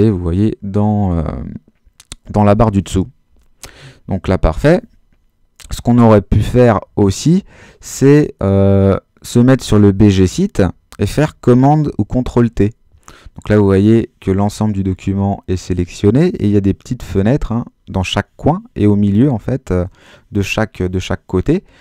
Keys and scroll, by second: 11.9 super+t.